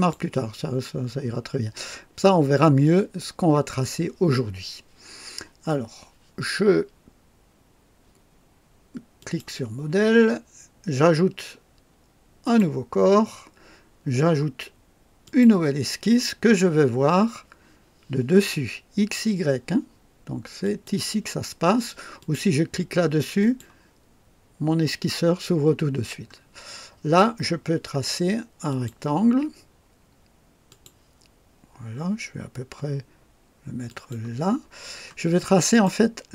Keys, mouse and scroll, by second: 0.9 scroll up 1, 9.1 click, 12.4 click, 15.2 click, 17.1 scroll down 1, 20.6 click, 22.1 click, 23.4 click, 28.6 click, 30.6 click, 33.8 click, 34.7 scroll up 1, 35.3 right click.